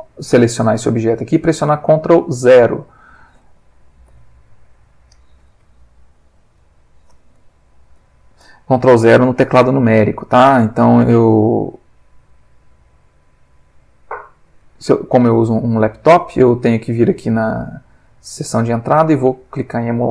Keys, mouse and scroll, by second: 4.1 ctrl+0, 6.6 middle click, 8.0 ctrl+alt+0, 9.8-10.5 middle drag, 12.6 click, 14.1 click, 17.6 click, 19.5 click.